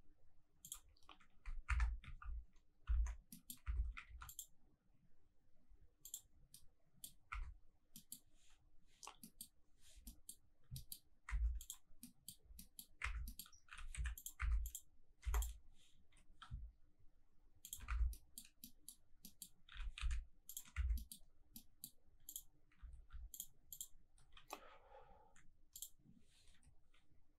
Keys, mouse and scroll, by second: 0.6 shift+click, 0.9-1.7 scroll up 1, 1.7 Tab, 2.2 ctrl+1, 2.9 ctrl+2, 3.2 scroll down 1, 3.3 middle click, 3.8 Tab, 4.0 ctrl+r, 6.0 click, 6.5 middle click, 7.1 scroll up 1, 7.3 Tab, 7.4-7.8 scroll down 1, 7.8 scroll up 1, 7.9 middle click, 9.1 scroll down 1, 9.2 middle drag, 9.5-10.0 scroll up 2, 10.0 middle click, 10.2-10.7 scroll up 2, 10.7 shift+middle click, 11.1 scroll up 1, 11.2 Tab, 11.6 click, 11.8-12.6 scroll down 3, 12.0 middle click, 12.6 middle click, 13.0 Tab, 13.2-13.6 scroll down 2, 13.2 middle click, 13.7 g, 13.9 z, 14.2 click, 14.4 Tab, 14.6 click, 14.9 scroll up 2, 15.2 3, 15.3 click, 16.2 i, 17.6 shift+click, 17.9 Tab, 18.1 scroll down 3, 18.1 middle drag, 18.5 scroll up 2, 18.6 middle drag, 18.9 scroll down 1, 19.2 middle drag, 19.7 g, 19.9 z, 20.5 ctrl+click, 20.7 Tab, 20.7-21.5 scroll up 3, 20.9 middle click, 21.5 middle click, 22.2 click, 23.3 alt+click, 23.7 alt+click, 25.7 click, 26.6 i.